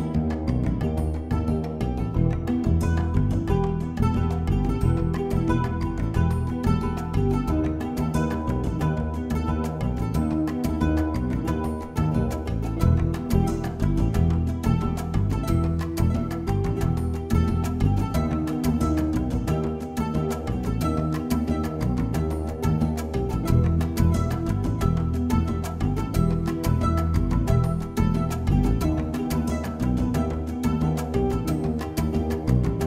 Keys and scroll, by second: 3.0 ].